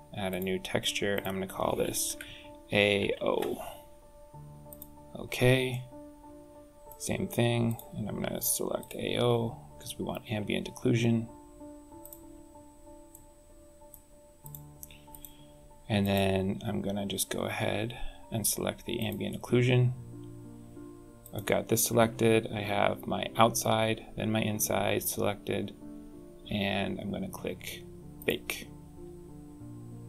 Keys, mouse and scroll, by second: 0.1 click, 5.5 middle click, 7.5 click, 11.8 click, 12.9 middle click, 14.2 click, 14.9 click, 15.8 click, 21.0 click, 28.0 click.